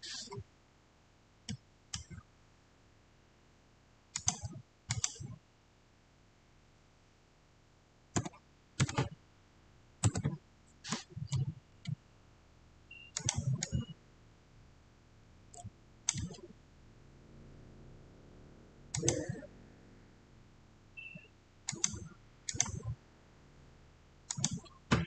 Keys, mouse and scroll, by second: 0.6-1.1 scroll down 1, 1.4-4.0 middle drag, 4.0 click, 8.1 click, 8.1-8.6 typing, 9.9 Return, 13.0 Return, 13.0-18.3 drag, 15.8 typing, 18.8 click, 18.8 typing, 21.5 click, 21.6 click.